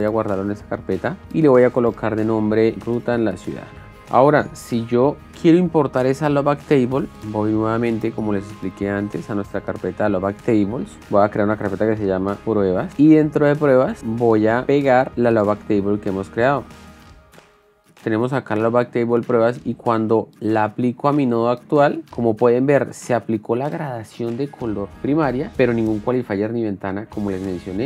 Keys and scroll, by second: 2.5-3.6 typing, 11.0 ctrl+shift+n, 12.4-13.3 typing, 13.6 super+e, 16.6 v.